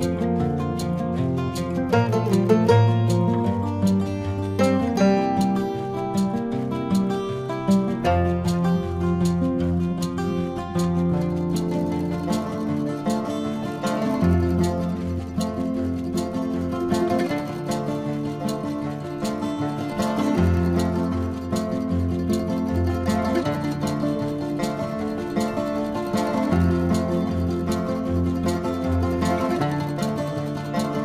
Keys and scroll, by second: 5.9 space, 12.0 ctrl+alt+z, 13.2 ctrl+=, 24.4 ctrl+=, 26.0 ctrl+-, 26.4 space, 27.0 ], 28.2 ].